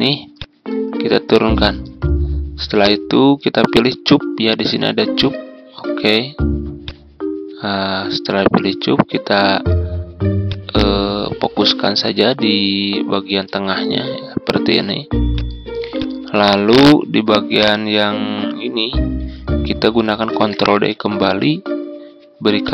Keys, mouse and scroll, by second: 5.1-17.7 drag, 20.2 ctrl+d, 22.6 click.